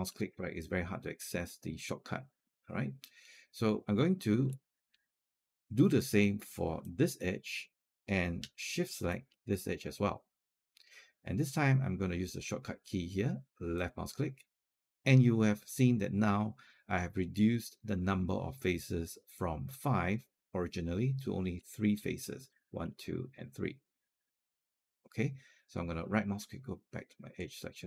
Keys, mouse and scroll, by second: 6.6 click, 8.9 shift+click, 13.6 click, 21.3 right click, 22.3-25.2 drag, 25.8-27.8 right drag.